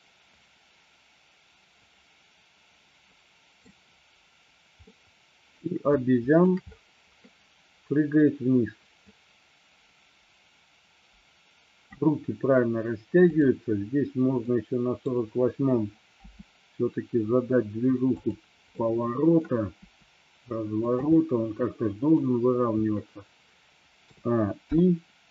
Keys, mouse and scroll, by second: 5.0-5.8 middle drag, 6.1-6.6 shift+middle drag, 9.1-12.1 drag, 14.5-15.2 middle drag, 16.2 r, 18.2 click, 18.8 middle click, 20.0 r, 21.0 click, 21.2-22.3 middle drag, 24.1 a, 24.7 i.